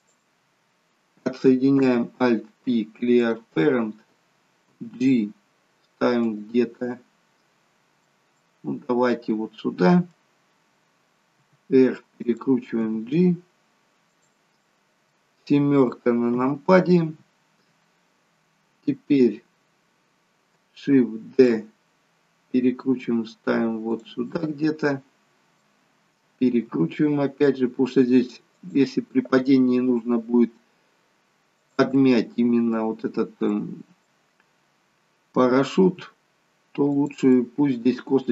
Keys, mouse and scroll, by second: 1.6 alt+p, 4.6 g, 6.8 middle click, 8.3 middle click, 11.2 r, 12.8 g, 14.5 middle click, 16.3 KP_7, 21.2 shift+d, 24.3 middle click, 26.6 r, 30.1 g, 31.8 middle click, 33.5 middle click, 34.3-34.8 scroll up 4, 35.7 r, 37.2 middle click.